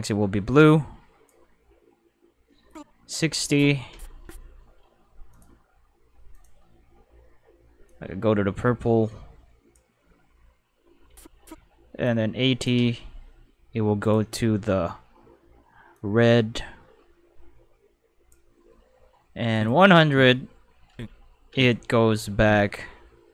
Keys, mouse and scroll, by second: 2.6 click, 5.3 click, 6.3 click, 7.8 click, 12.0 click, 14.0 click, 15.9-18.3 drag, 19.5 click.